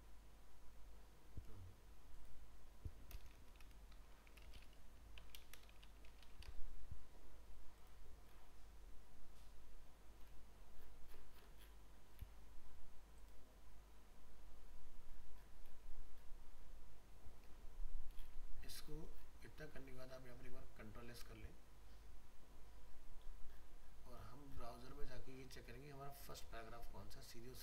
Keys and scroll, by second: 3.8 ctrl+shift+Left.